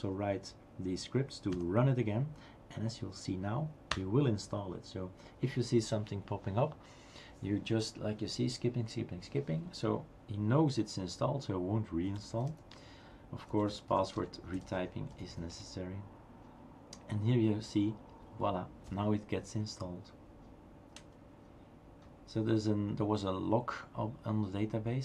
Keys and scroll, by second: 1.5 Up, 4.0 Return, 11.8-15.8 typing.